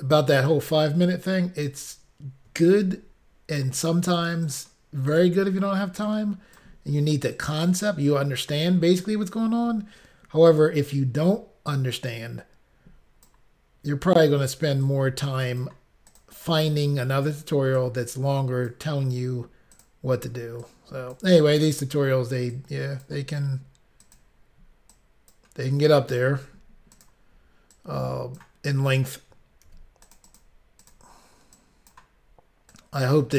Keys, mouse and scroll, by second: 1.2 click, 3.0 ctrl+r, 4.2 click, 4.3 click, 4.5 click, 4.7 double click, 5.2 double click, 5.3 double click, 6.1 double click, 7.4 click, 7.6 click, 8.7 click, 8.8 click, 10.6 click, 10.7 click, 11.8 click, 15.7 click, 16.2 click, 16.3 click, 16.7 click, 17.8 click, 19.8 click, 20.7 click, 21.7 click, 21.8 click, 22.6 click, 24.1 click, 24.2 click, 25.0 click, 27.0 click, 27.1 click, 27.8 click, 29.8 ctrl+r, 30.2 click, 30.3 click, 30.4 click, 30.5 double click, 30.9 double click, 31.7 double click, 32.8 click.